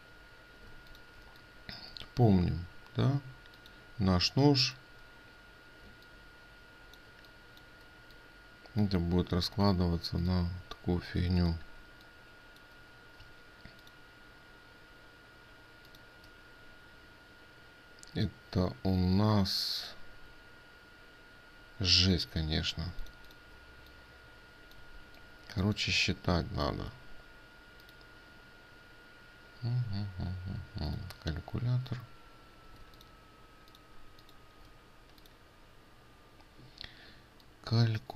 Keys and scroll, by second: 1.3 ctrl+alt+space, 6.4 ctrl+space, 9.9 ctrl+space.